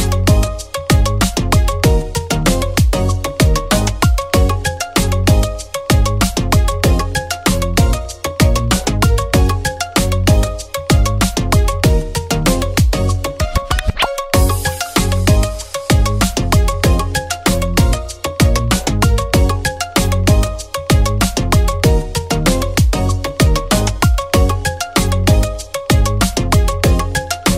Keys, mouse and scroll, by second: 1.4-6.6 drag, 9.3-10.8 typing, 9.6 click, 12.1 0, 13.3 Tab, 15.1 click, 15.1 typing, 17.3 click, 18.9 space, 20.2 click, 20.2 typing, 22.1 space, 22.8-27.5 drag.